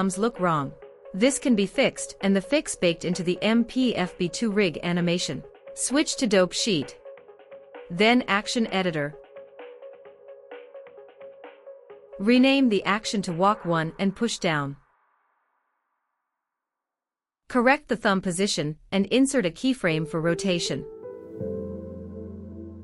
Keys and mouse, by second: 0.0 click, 0.1 middle click, 0.2 drag, 0.5-1.0 middle drag, 1.9 click, 2.0 middle click, 2.1 drag, 2.4-3.3 middle drag, 8.4-10.3 drag, 17.4 r, 21.9 i.